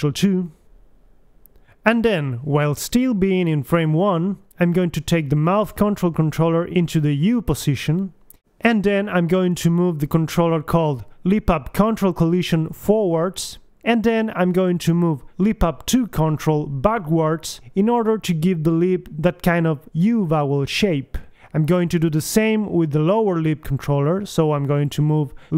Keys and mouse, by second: 0.0 alt+r, 0.1 alt+s, 0.4 click, 0.4 a, 1.0 click, 1.3 alt+g, 1.5 alt+r, 1.6 alt+s, 1.7 Left, 1.9 alt+g, 2.0 alt+r, 2.3 alt+s, 2.3 Right, 2.7 right click, 3.1-4.2 drag, 3.2 g, 6.7 middle click, 7.7 KP_3, 9.1 right click, 9.8-10.9 drag, 11.2 g, 12.6 click, 14.7 right click, 14.9 g, 18.3 KP_3, 19.5-21.6 drag, 21.7 g, 23.1 click, 23.3 g, 24.5-25.5 drag, 25.3 g.